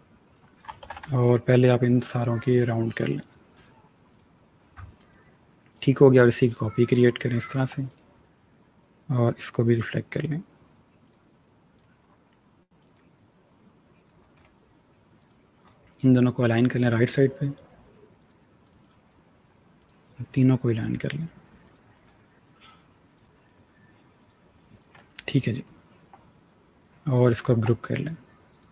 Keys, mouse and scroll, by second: 0.7 ctrl+z, 1.1 shift+click, 7.8 right click, 10.0 click, 11.0 click, 21.5 shift+click, 24.9 alt+scroll down 1, 26.0-27.0 scroll down 1, 27.0 alt+scroll down 1, 27.1-27.8 alt+scroll up 2, 27.8 click.